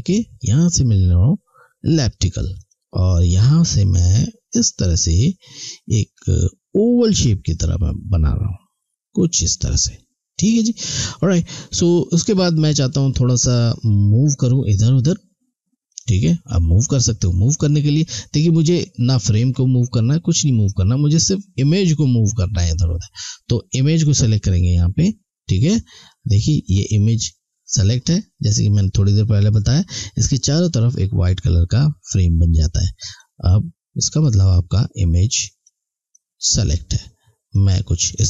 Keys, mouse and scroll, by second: 2.6 click, 15.8 click, 24.0 click, 33.1 click.